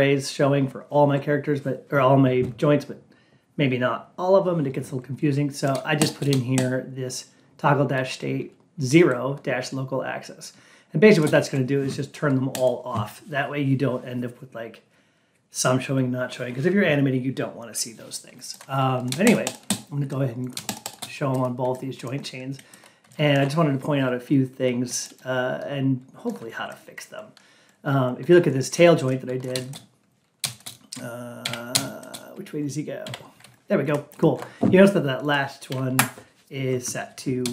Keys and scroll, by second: 35.8 Down.